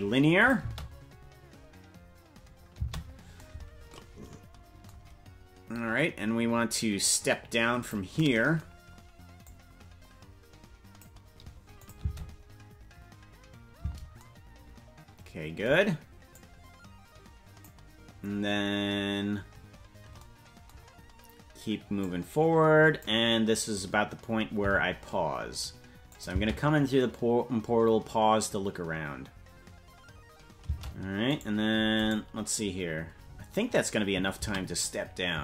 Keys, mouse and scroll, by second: 0.4 click, 0.5 space, 3.3 space, 7.0 click, 9.4-11.0 drag, 11.8 click, 11.9 space, 14.1 space, 16.3-17.7 drag, 22.0-23.0 drag, 26.1 click, 26.3 space, 31.1 space, 31.3 right click, 32.3 right click.